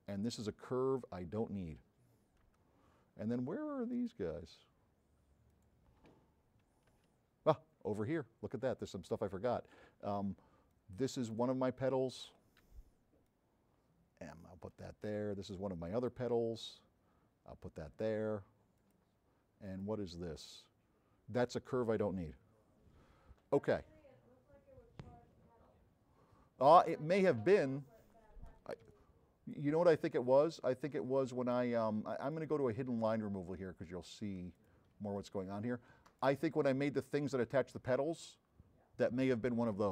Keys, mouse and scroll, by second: 4.0 click, 5.6 click, 7.0 f, 7.5 middle click, 7.5-8.3 scroll down 3, 7.8 middle click, 8.2 middle click, 8.4 middle click, 8.4 scroll up 2, 10.8 n, 13.0 m, 13.3-15.2 drag, 16.0 click, 16.7-17.4 drag, 16.7 m, 26.4 middle click, 26.4-26.8 scroll up 1, 27.0 middle click, 27.0-27.4 scroll up 2, 27.3 middle click, 29.0 s, 29.9-32.4 right drag, 32.4 click, 34.6 click, 35.1 s, 35.2-36.3 right drag.